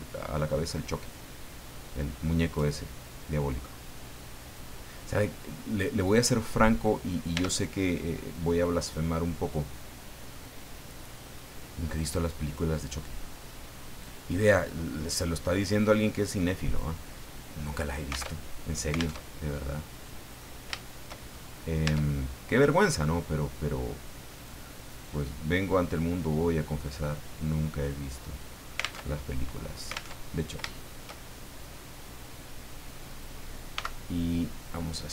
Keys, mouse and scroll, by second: 1.1-4.7 drag, 5.1-7.3 middle drag, 7.3 Tab, 7.8 middle click, 8.8 scroll down 2, 9.7-12.1 drag, 12.4 right click, 13.3 click, 14.2 middle click, 15.8 click, 17.1 scroll down 1, 17.4 middle click, 18.3 alt+Tab, 19.2 alt+Tab, 19.4-19.7 scroll down 2, 19.8 middle click, 20.7 shift+middle click, 21.2-21.6 shift+scroll up 3, 21.8 Tab, 22.1 middle click, 24.3 click, 24.9 right click, 25.3 scroll down 1, 25.6 middle click, 26.9 click, 29.0 alt+Tab, 30.1 alt+Tab, 30.2-30.5 scroll down 2, 30.7 shift+middle click, 32.0-33.4 drag, 33.7 s.